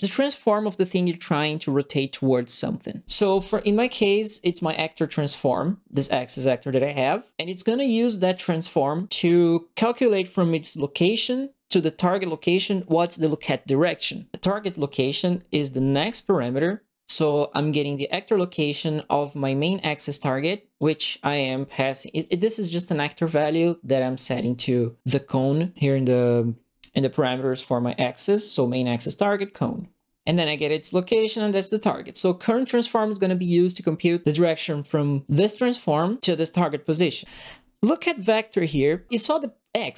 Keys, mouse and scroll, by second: 3.7 right click, 4.6 click, 6.7 click, 18.7 click, 20.0 click, 20.7 click, 21.3 click, 22.2 click, 22.8 click, 24.5 click, 30.2 click.